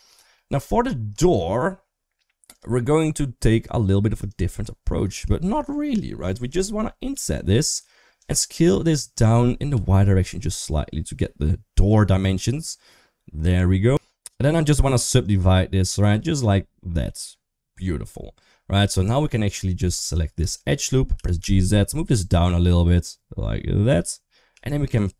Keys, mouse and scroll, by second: 0.2 middle click, 0.4 Tab, 1.0 shift+middle click, 4.1 right click, 4.9 3, 6.3 click, 6.9 i, 8.4 s, 15.1 right click, 19.6 2, 19.9 click, 20.3 shift+click, 20.9 g, 24.3 3.